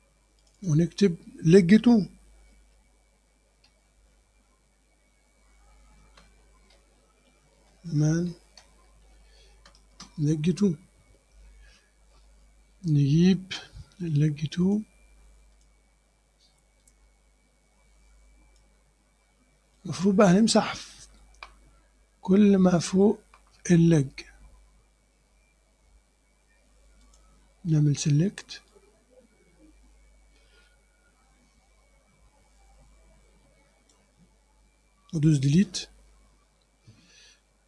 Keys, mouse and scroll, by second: 0.5 click, 2.3-3.7 typing, 6.0 space, 6.3 3, 6.8 Left, 7.3 Left, 8.1-9.5 typing, 9.9 Return, 14.7 click, 15.6 click, 16.9-18.8 drag, 19.4 scroll down 2, 19.8 click, 20.3 scroll up 2, 21.0 click, 21.1-21.5 scroll up 2, 22.1 scroll up 2, 22.5 click, 27.1 click, 28.7-34.2 drag, 35.7 Delete.